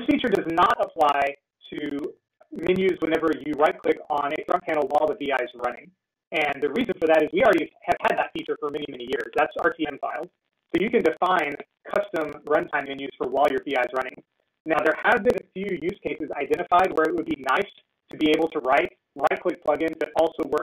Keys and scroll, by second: 3.1 ctrl+e.